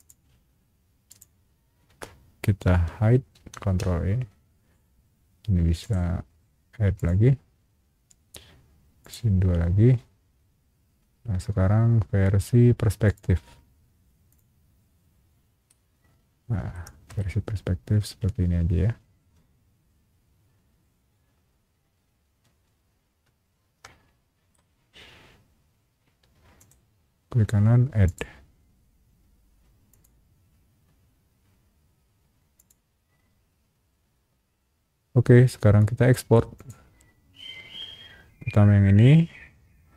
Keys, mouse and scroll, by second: 0.0 click, 1.1 click, 3.3 ctrl+e, 5.8 right click, 6.9 click, 9.0 click, 13.0 click, 14.3 click, 15.7-16.7 middle drag, 17.2-24.5 shift+middle drag, 26.6 shift+right click, 28.0 click, 29.9 click, 32.5 click, 36.5 click.